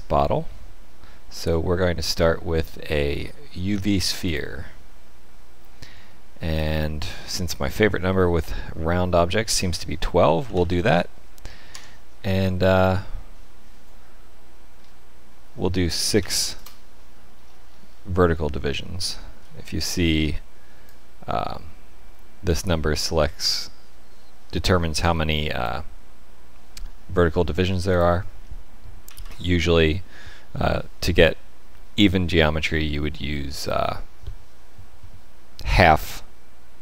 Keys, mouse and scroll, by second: 6.5 click, 17.3-18.3 scroll down 7, 18.6 shift+middle click, 20.8 shift+click, 27.8 click, 32.7 shift+middle click.